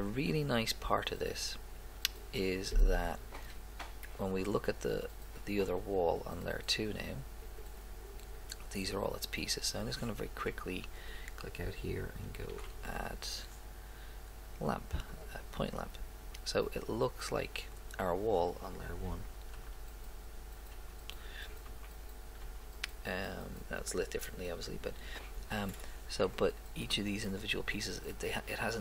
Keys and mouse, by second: 4.2 middle click, 7.4 click, 11.0 click, 19.7 1, 20.7 2, 21.7 1, 22.4 2, 26.3 right click.